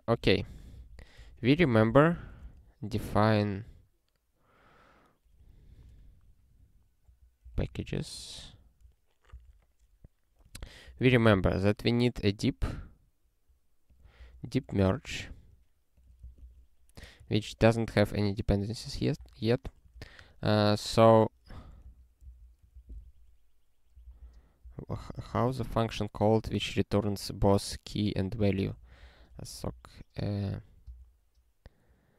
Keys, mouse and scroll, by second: 0.0-2.8 typing, 5.1-9.1 typing, 9.3 Return, 10.3-11.5 typing, 12.6 scroll down 1, 13.8 click, 14.2 ctrl+space, 14.4 ctrl+a, 14.8 alt+w, 15.9 click, 16.2 Return, 16.4 ctrl+y, 17.4 ctrl+e, 18.8 ctrl+p, 19.1 Return, 19.9 ctrl+p, 20.2 Tab, 20.5 (, 21.5 ctrl+n, 21.8 alt+f, 22.2 alt+d, 22.7 ctrl+e, 24.0 alt+b, 24.2 alt+b, 24.6 alt+b, 24.9 alt+b.